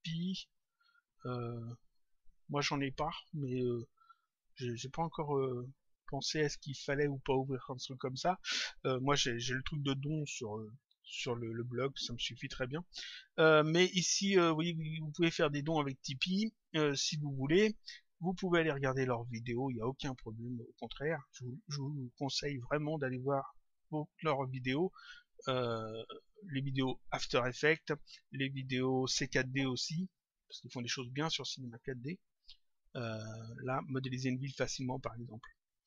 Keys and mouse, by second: 21.5 click, 24.4 click, 29.9 click.